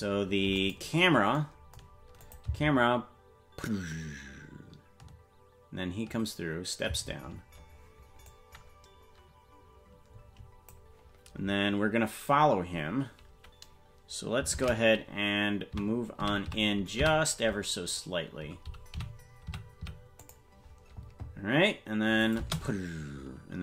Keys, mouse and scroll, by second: 0.5 click, 2.2 click, 2.4 space, 7.2 space, 8.2-10.7 drag, 14.5 shift+`, 22.2 click, 22.4 space.